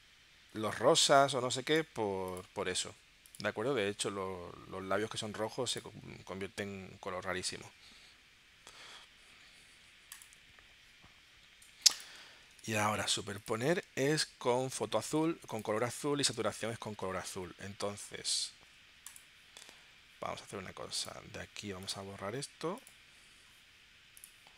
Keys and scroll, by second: 12.6 super+Tab, 13.9 space, 14.8 space, 15.7 space, 16.3 space, 17.1 super+Tab.